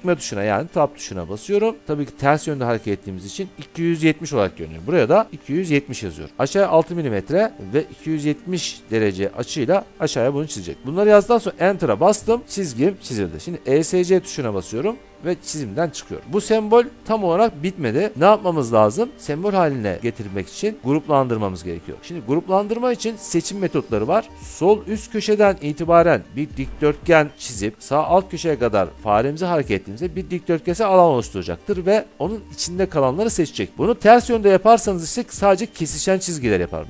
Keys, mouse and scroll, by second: 0.7 Tab, 5.3-6.3 typing, 11.5 Return, 15.0 Escape, 16.2 middle click.